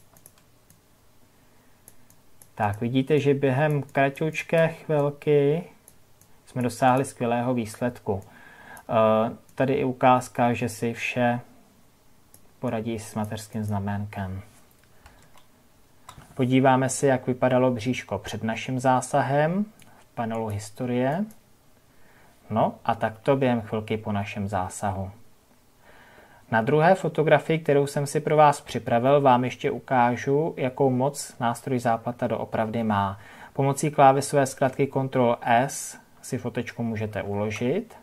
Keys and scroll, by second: 15.0 ctrl+KP_Subtract, 22.9 ctrl+z, 37.0 ctrl+s.